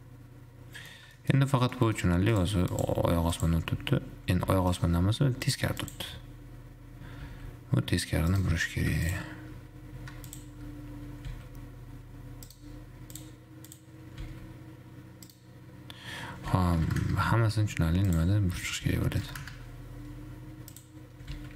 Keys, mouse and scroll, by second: 1.7 scroll down 2, 2.0-2.7 middle drag, 2.9 click, 4.7 r, 5.2-5.7 scroll up 4, 5.7 click, 6.2 click, 7.8 r, 9.3 shift+click, 10.7 shift+click, 11.7 r, 13.3 drag, 13.9 click, 14.7 r, 16.8 r, 18.3 click, 19.2 r, 21.0 click, 21.4 r.